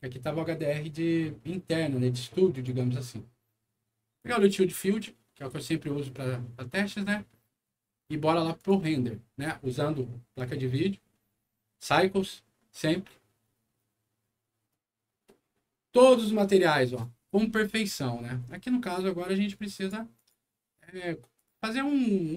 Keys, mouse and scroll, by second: 2.5 click, 4.2 click, 4.3 click, 8.6 click, 19.7 click, 20.1 click, 21.3 click.